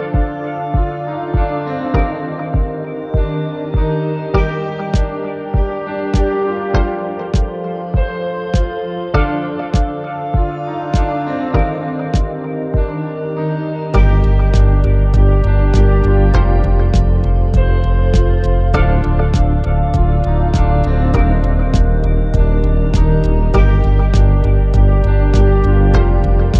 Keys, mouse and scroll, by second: 0.0-0.3 typing, 0.2 click, 1.2 click, 1.4-3.4 typing, 2.2 click, 2.4 click, 3.1 click, 3.4 click, 3.6 shift+middle click, 3.8 scroll up 2, 3.9 scroll down 3, 3.9 shift+middle click, 4.3 click, 4.3 shift+middle click, 4.9 shift+click, 5.0 middle click, 5.1 scroll up 1, 5.2 click, 5.4 middle click, 5.4 ctrl+z, 6.6 click, 6.7 click, 6.8 middle click, 6.9 click, 7.2 scroll down 2, 7.3 middle click, 7.3 click, 8.0 right click, 8.3 click, 8.4 middle click, 8.5 scroll down 2, 8.5 shift+middle click, 8.7 scroll up 3, 8.8 middle click, 9.0 /, 9.0 middle click, 9.1 click, 9.6 middle click, 9.9 g, 10.2 click, 10.3 scroll up 1, 10.3 shift+middle click, 10.7 click, 10.8 click, 10.8 g, 11.1 middle click, 11.1 right click, 11.3 middle click, 11.3-12.0 scroll down 3, 11.5 click, 11.7 middle click, 11.8 click, 11.9 click, 12.0 middle click, 12.2 scroll up 2, 12.3 click, 12.4 middle click, 12.7 click, 13.0 middle click, 13.6 click, 13.9 middle click, 14.0 click, 14.3 middle click, 14.6 middle click, 15.0 click, 15.2-20.4 typing, 15.6 click, 16.1 middle click, 16.4 click, 16.9 middle click, 17.3 middle click, 17.8 click, 17.8 middle click, 18.2 middle click, 18.3 click, 18.4 middle click, 18.5 click, 18.8 click, 19.0 middle click, 19.3 middle click, 19.7 middle click, 19.9 shift+click, 20.6 click, 20.7-21.8 middle drag, 21.8 click, 21.9 scroll down 2, 22.0 click, 22.1 click, 22.1-23.0 typing, 22.9 click, 23.2 click, 23.3 middle click, 23.5 middle click, 23.8 scroll up 2, 23.9 click, 24.1 middle click, 24.5 click, 24.8 middle click, 25.2 click, 25.5 click, 25.8 middle drag, 26.3 scroll up 2, 26.3 shift+middle click, 26.5 scroll down 2.